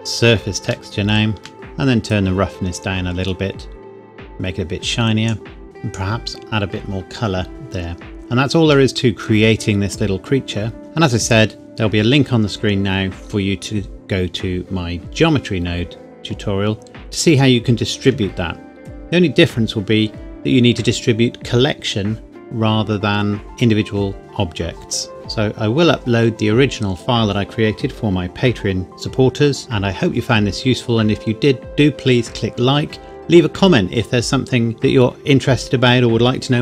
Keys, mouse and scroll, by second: 0.9 shift+middle click, 1.5-1.8 scroll up 1, 2.0 click, 8.0 scroll down 1, 8.1 middle click, 8.5-8.9 scroll down 1, 8.9 middle click.